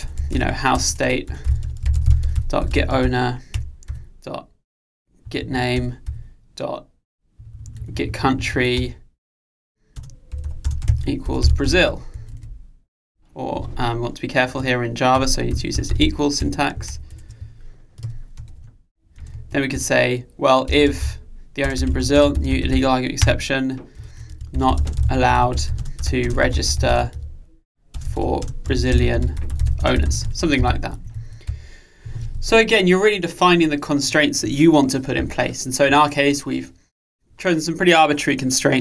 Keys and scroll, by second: 3.6 Return, 16.5 Return, 18.0 Delete, 23.3 Return.